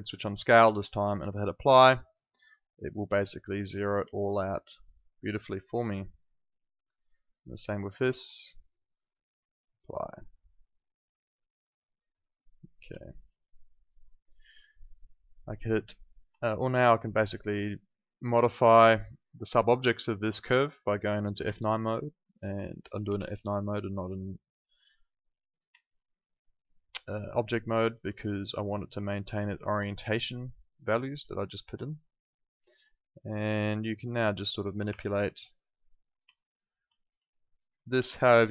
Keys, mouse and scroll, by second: 4.2 alt+right click, 4.6 alt+middle click, 5.8 alt+right click, 7.3 click, 12.2 click, 12.9 alt+middle click, 13.3 alt+right click, 13.7 alt+click, 14.0 alt+middle click, 14.7 alt+click, 15.5 alt+middle click, 15.7 alt+right click, 16.4 alt+click, 16.7 alt+middle click, 17.1 alt+right click, 17.3 alt+click, 18.7 alt+click, 19.0 alt+middle click, 19.9 alt+click, 21.4 F9, 21.9 click, 22.6 alt+click, 23.0 e, 23.8 click, 25.7 alt+click, 28.6 click, 29.9 alt+click, 34.8 r, 35.4 click, 36.3 alt+click, 36.9 alt+click, 37.9 w, 38.3 click.